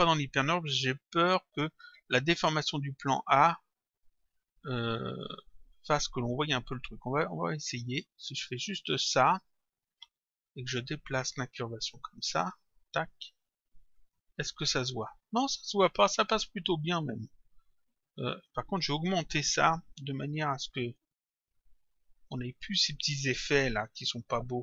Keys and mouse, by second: 4.0 click, 7.3 click, 9.2 click, 10.6 click, 12.1 click, 14.0 click, 18.4 click, 20.8 click.